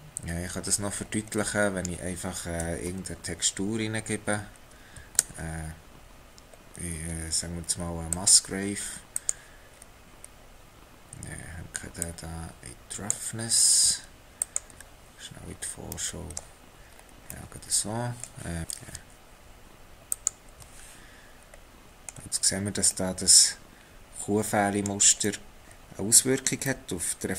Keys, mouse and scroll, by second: 0.7 scroll down 7, 1.3 middle click, 4.4-4.7 scroll down 1, 4.7-5.2 scroll up 1, 5.2 shift+a, 9.7-12.0 scroll up 4, 12.0 click, 15.5-15.9 scroll down 2, 16.1 middle click, 16.9-17.3 scroll, 17.5 middle click, 18.6 ctrl+shift+click, 20.2 ctrl+shift+click, 21.4 scroll up 1, 21.6 middle click, 22.5-22.9 scroll up 1, 22.9 middle click.